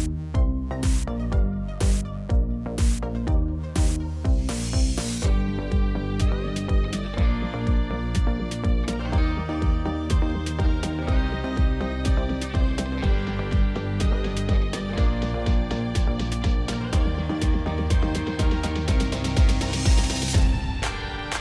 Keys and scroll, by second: 3.0 Right, 3.6 2, 8.5 Tab, 9.1 2, 9.6 ., 9.8 Return, 13.6 l, 13.8 p, 13.9 l, 14.1 Return, 15.4 Tab, 16.1 ctrl+z, 16.6 ctrl+c, 16.8 Tab, 17.5 ctrl+v, 18.3 x, 19.3 g, 19.9 Tab, 20.4 u.